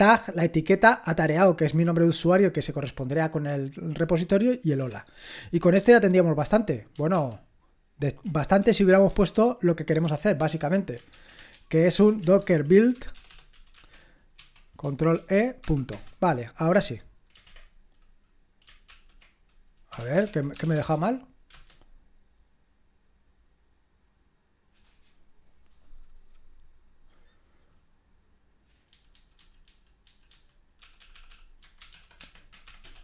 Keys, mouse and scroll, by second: 4.8 Return, 7.1 ctrl+p, 8.6-10.4 typing, 11.1 ctrl+a, 11.5 alt+f, 11.9-15.1 typing, 18.8 ctrl+l, 19.7-21.2 typing, 21.5 Return, 28.9-33.0 typing.